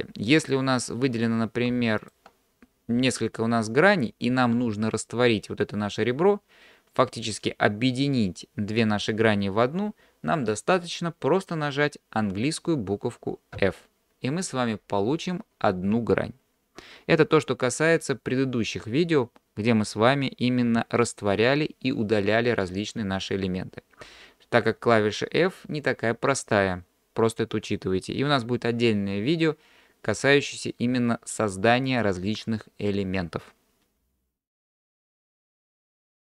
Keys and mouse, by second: 0.4 click, 2.0 shift+click, 13.6 f.